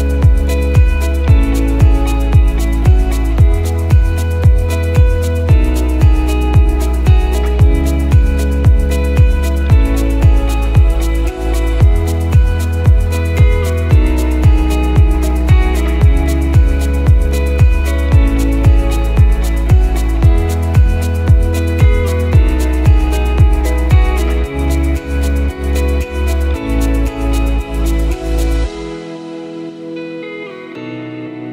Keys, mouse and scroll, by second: 0.2 click, 1.3 x, 3.5 click, 6.6 click, 6.7 l, 8.1 click, 9.6 x, 10.6 click, 11.4 click, 12.2 alt+click, 12.3 alt+click, 13.2 click, 15.7 alt+shift+click, 16.9 right click, 19.4 click, 20.3 KP_1, 21.1-22.1 scroll down 4, 22.1 Tab, 23.4 click, 24.8 right click, 27.5 click, 27.9-28.6 scroll down 7, 28.6 click, 28.6-29.1 scroll down 1, 29.4 click, 30.7 click.